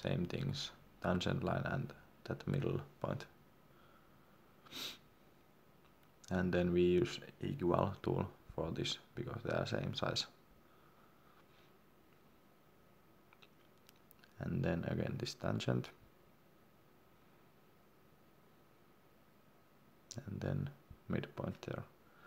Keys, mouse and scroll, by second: 3.3 scroll down 1, 4.5 click, 10.6 Escape, 12.6 click, 14.9 Escape, 15.5 click, 19.1 Escape, 20.0 click.